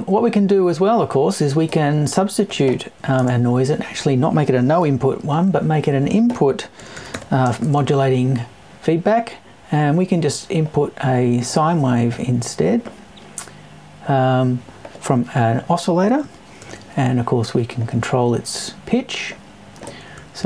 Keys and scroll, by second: 3.2 BackSpace.